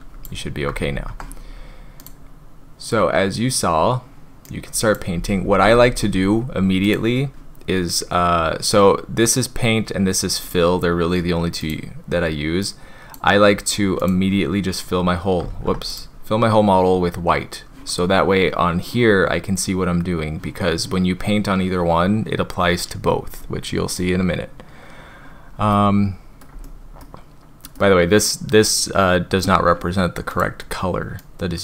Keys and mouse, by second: 1.0 ctrl+z, 4.4 click, 5.4 ctrl+z, 10.4 click, 11.6 click, 14.0 click, 15.5 ctrl+z, 15.9 click, 23.9 click, 25.7-26.4 shift+middle drag, 26.6 middle click, 27.7 middle drag.